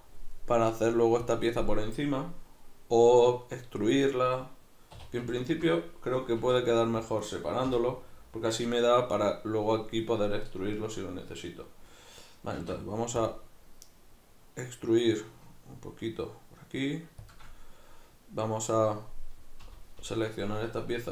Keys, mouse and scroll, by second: 5.0 2, 5.4-6.4 alt+right drag, 6.4 v, 7.2 right click, 7.7 l, 12.6 alt+e, 17.4 shift+click, 19.6 l.